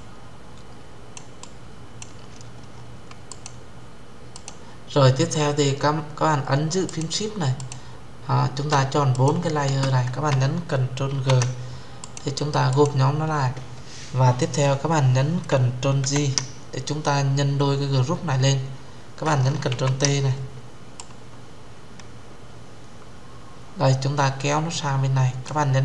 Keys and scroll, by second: 10.8 ctrl+g, 15.7 ctrl+j, 19.4 ctrl+t, 25.7 Return.